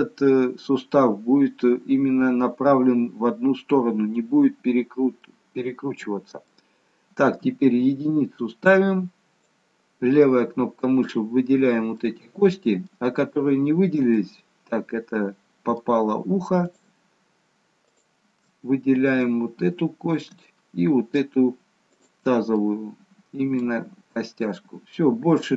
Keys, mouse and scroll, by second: 4.8-5.2 scroll up 1, 5.2 middle click, 7.4 KP_1, 9.4 click, 11.9 middle click, 14.2 middle click, 16.5 shift+click, 18.4 middle click, 20.3 middle click, 21.9 shift+click, 22.5 middle click, 24.3 middle click.